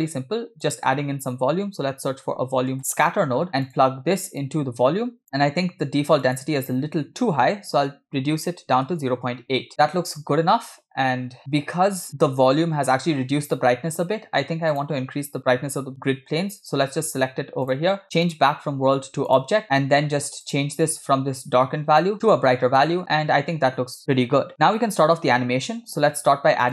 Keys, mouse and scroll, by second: 0.0 shift+a, 4.4-5.2 drag, 5.2 scroll up 1, 6.3-9.7 drag, 11.4 click, 14.8 click, 17.7 click, 18.3-19.4 drag, 19.6 middle click, 19.9-20.2 scroll up 1, 20.5 click.